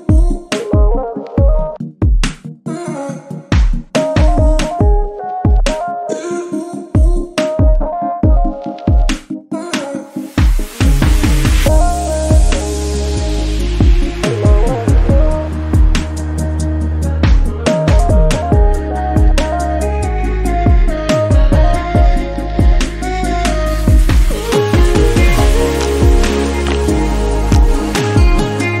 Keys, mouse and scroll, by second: 0.6 scroll down 1, 0.9 shift+middle click, 1.2 scroll up 4, 1.5 shift+click, 2.3 x, 3.0 scroll down 2, 3.2 shift+middle click, 3.8 scroll up 1, 4.1 click, 4.5 scroll down 4, 4.7 shift+middle click, 5.1-5.4 scroll up 1, 5.4 shift+click, 6.1 scroll down 1, 6.3 shift+middle click, 6.6-7.1 scroll up 1, 7.1 click, 8.8 click, 9.3 Tab, 9.5 click, 9.8-10.4 scroll down 4, 10.4 shift+middle drag, 10.6-11.0 scroll up 1, 11.0 click, 11.1 Tab, 12.0 click, 12.9 click, 14.4 click, 15.2 click, 16.7 x, 17.9 scroll down 1, 18.2 shift+middle click, 18.8-19.8 scroll up 5, 19.0 shift+middle click, 19.8 click, 20.4 click, 22.1 click, 23.0 x, 23.5-23.9 scroll down 7, 23.9 shift+middle click, 24.3 Tab, 24.9 click, 25.2 alt+z, 25.4 click, 25.6 scroll down 2, 25.7-27.8 middle drag, 27.8 click, 28.2 KP_1, 28.6-28.8 scroll up 4.